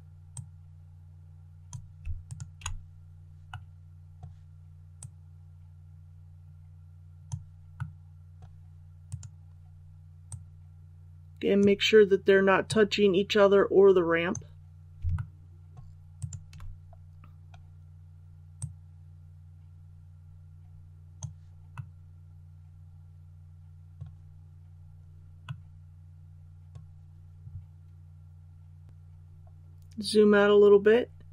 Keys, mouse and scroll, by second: 0.3-1.9 drag, 2.2 shift+right click, 3.4-4.5 middle drag, 4.9-7.5 drag, 7.7 middle click, 9.0 right click, 10.2-14.5 drag, 15.1 shift+middle click, 16.1 shift+right click, 16.9 scroll down 1, 18.5-21.5 drag, 21.7-24.3 middle drag, 24.3-25.4 scroll up 1, 25.4-27.5 middle drag, 28.9-31.3 scroll down 1.